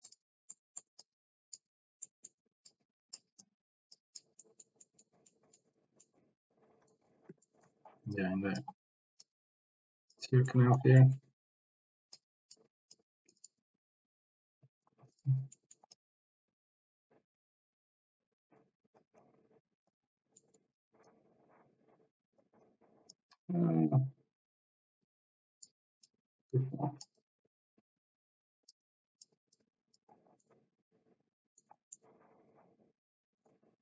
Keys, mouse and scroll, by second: 0.7 middle click, 1.0 click, 2.0 middle click, 3.3 click, 4.5 middle click, 4.9 middle click, 5.3 middle click, 6.2 middle click, 7.4 shift+middle click, 8.2 click, 9.4 click, 10.6 middle click, 11.0 middle click, 12.2 click, 12.9 click, 15.1 click, 15.6 middle click, 15.9-19.0 drag, 19.2 click, 20.4 middle click, 21.0-22.4 drag, 22.8 click, 25.1 click, 26.1 click, 27.3-28.7 drag, 28.9 click, 29.6 click, 30.6-31.6 middle drag, 31.9-33.4 middle drag.